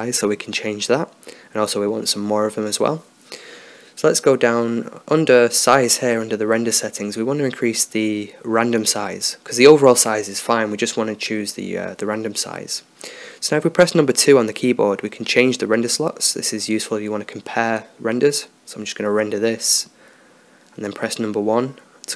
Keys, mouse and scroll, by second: 10.5-14.7 drag, 14.7 2, 15.7 1, 16.2 2.